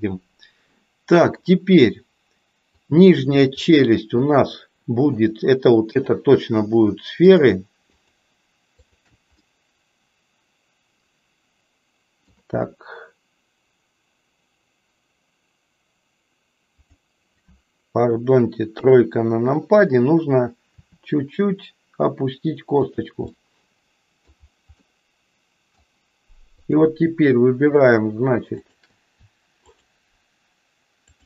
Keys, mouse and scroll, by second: 0.7 middle click, 2.7 click, 3.7 shift+click, 4.3 shift+click, 5.0 shift+click, 5.9 shift+click, 7.2 shift+click, 8.9 shift+click, 9.4-12.4 middle drag, 16.6 click, 18.6 KP_3, 20.7 r, 23.4-24.4 middle drag, 24.9-25.9 middle drag, 26.7 click, 27.7 shift+click, 28.7 shift+click, 29.7 shift+click, 31.1 shift+click.